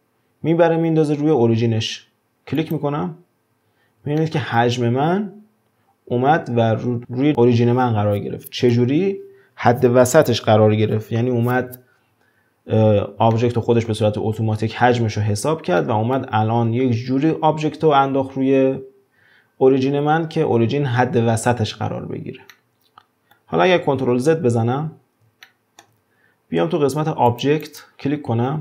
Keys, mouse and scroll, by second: 4.2-6.9 shift+middle drag, 6.9-8.5 scroll up 2, 12.7-13.3 scroll down 1, 13.3-18.8 middle drag, 22.5-24.0 middle drag, 24.0 ctrl+z, 24.6-25.5 scroll down 2, 25.5-27.3 shift+middle drag, 27.3 click, 27.6-28.6 drag.